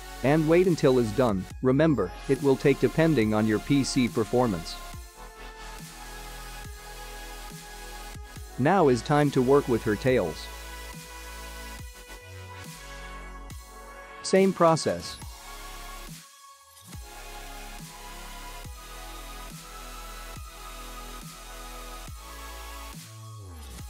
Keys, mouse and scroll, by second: 7.2 space, 10.0 click, 14.4 click, 15.8 middle click, 17.1 ctrl+s, 17.7-18.3 scroll down 3, 18.3 shift+middle click, 18.8-19.7 scroll up 3, 19.7 click, 20.4 click, 20.7 `, 21.3 middle click, 23.4 Tab.